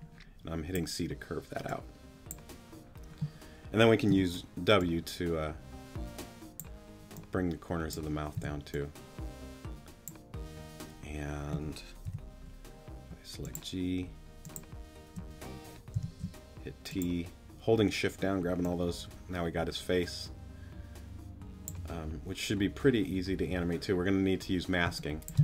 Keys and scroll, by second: 4.1 w, 8.3 t, 12.0 g, 13.1 shift+g, 15.9 shift+t, 24.8 space.